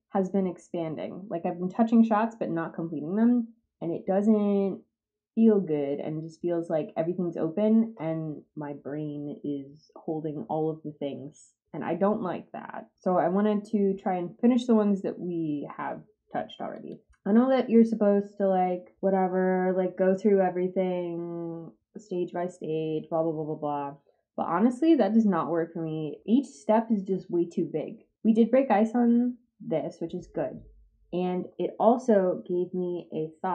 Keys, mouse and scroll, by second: 16.7 click.